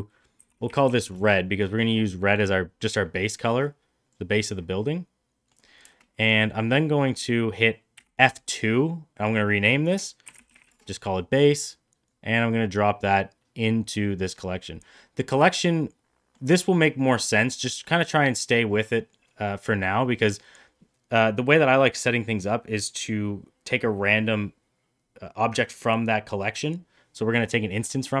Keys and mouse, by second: 2.7 click, 4.6-5.5 middle drag, 7.9 F2, 12.0-12.6 drag, 15.4 middle click, 27.5 middle click.